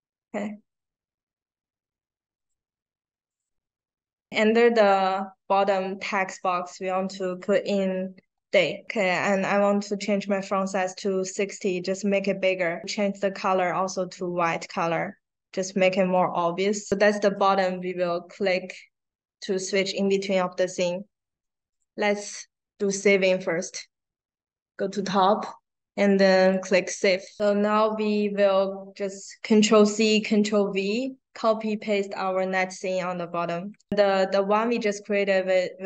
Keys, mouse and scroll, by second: 2.3 click, 7.7 d, 8.1 a, 11.2-11.7 scroll down 2, 14.5 click, 16.0 click, 21.6 click, 22.7 click, 27.1 click, 27.3 click.